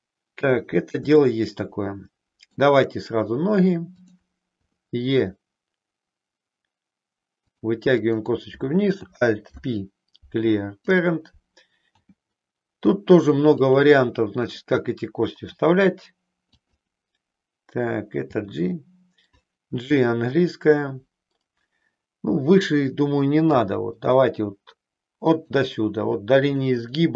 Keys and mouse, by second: 1.4-2.6 shift+middle drag, 3.8 click, 4.7 e, 9.5 alt+p, 12.0 g, 13.6 click, 14.5 click, 15.5 r, 16.6 click, 18.4 g, 23.5 g, 25.5 click.